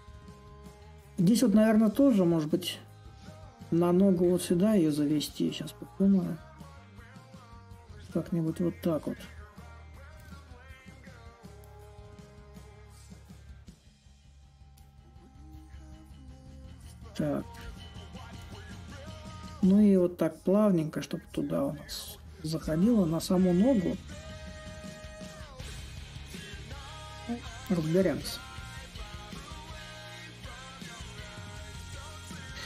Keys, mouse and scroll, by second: 5.6-10.7 drag, 12.4-16.4 drag, 16.5 middle click, 18.9-24.0 drag, 24.4-32.6 drag.